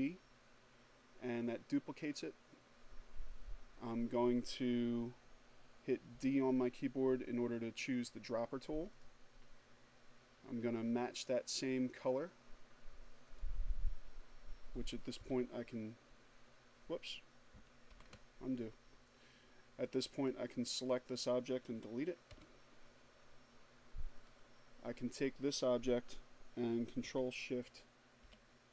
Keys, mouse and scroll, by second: 4.1 d, 7.1 click, 11.5 click, 13.1 Delete, 15.8 ctrl+z, 18.3 click, 20.2 Delete, 22.4 click, 26.2 ctrl+shift+o, 28.4 =.